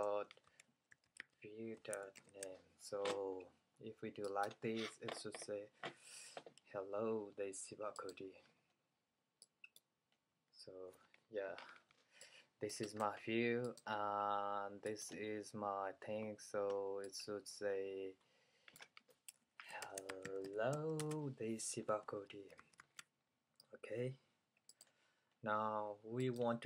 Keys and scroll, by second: 0.3-2.3 typing, 19.9-25.6 typing.